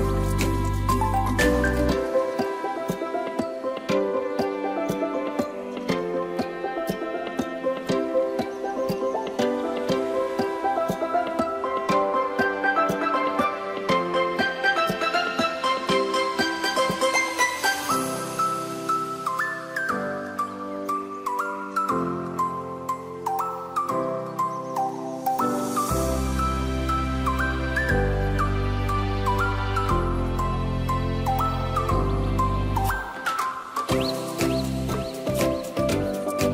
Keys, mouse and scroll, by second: 0.4-2.0 scroll up 1, 4.3 s, 7.9-8.4 scroll up 2, 8.4-9.0 shift+middle drag, 9.0-10.1 scroll up 1, 10.1 s, 15.3-18.5 drag, 20.3 click, 21.0-22.5 scroll up 1, 22.5 Tab, 23.7 ctrl+r, 25.9 ctrl+b, 31.5 click, 32.6 ctrl+r, 36.0 ctrl+b.